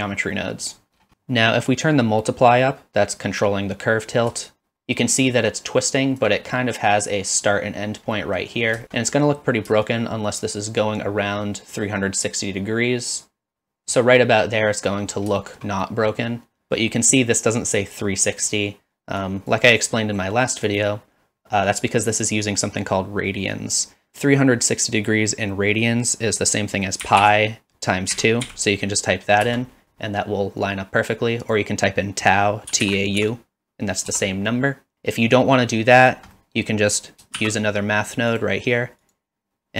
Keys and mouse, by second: 0.5 middle click, 1.1 middle click, 4.6-6.2 shift+drag, 6.6 middle click, 8.1 middle drag, 8.8 shift+click, 9.9-13.8 shift+drag, 13.8 middle click, 15.4 shift+middle click, 15.8 middle click, 19.2 drag, 20.0 click, 20.7 click, 24.1-30.0 drag, 31.5-34.9 drag, 36.4 middle click, 37.4 shift+d, 39.0-39.7 drag.